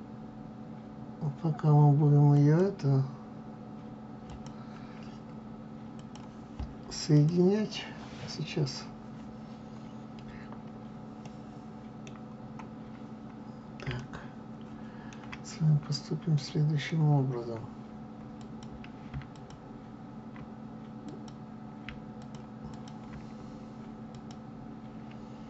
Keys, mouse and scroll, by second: 2.2 click, 4.2 click, 5.9 click, 7.1 click, 11.1-12.3 middle drag, 12.3-12.7 scroll up 1, 13.9-15.4 shift+middle drag, 15.4 scroll up 2, 16.3-18.3 middle drag, 18.3 click, 19.2 shift+click, 21.0 click, 22.0 shift+click, 22.6 shift+click, 23.5-24.0 scroll down 1, 24.0 click.